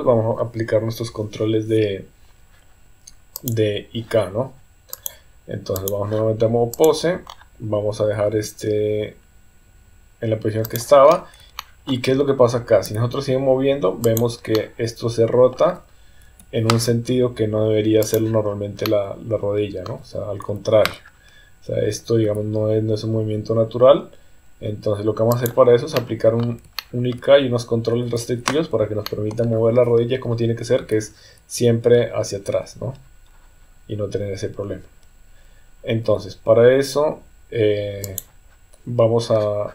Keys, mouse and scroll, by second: 3.3 click, 4.9-5.9 drag, 6.7 click, 8.3 r, 11.6 shift+middle click, 12.8 r, 14.5-15.6 middle drag, 16.3 KP_3, 18.1 click, 18.8-19.9 middle drag, 20.5 KP_3, 22.2 r, 25.9 middle click, 26.8 shift+middle click, 28.0 KP_3, 29.0 shift+middle click, 30.8 r.